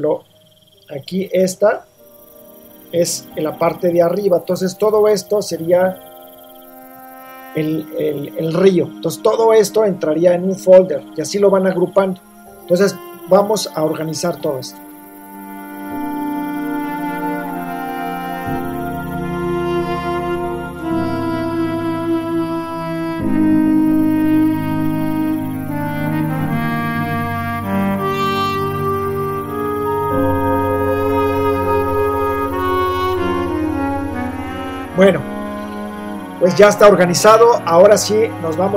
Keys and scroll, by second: 16.2 super+-, 17.7 v, 21.9-24.2 typing, 26.0 i, 26.1 space, 26.3 r, 32.9-33.7 typing.